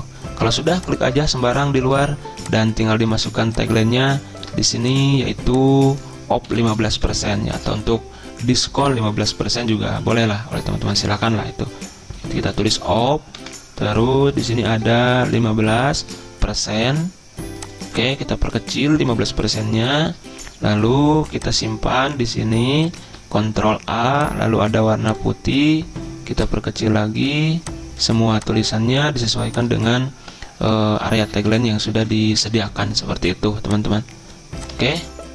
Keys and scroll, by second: 6.5 Delete, 7.2 Down, 7.9 ctrl+shift+Right, 8.2 ctrl+shift+Down, 8.9 BackSpace, 10.1 Up, 10.8 ctrl+a, 12.3-16.0 typing, 13.4 Return, 19.0-19.8 typing, 19.9 ctrl+[, 20.1 ctrl+[, 23.1 ctrl+a, 29.8 ctrl+a, 31.2 ctrl+[, 31.4 ctrl+[, 31.5 ctrl+[, 31.6 ctrl+[, 31.7 ctrl+[, 31.9 ctrl+[, 32.0 ctrl+[, 34.9 ctrl+a.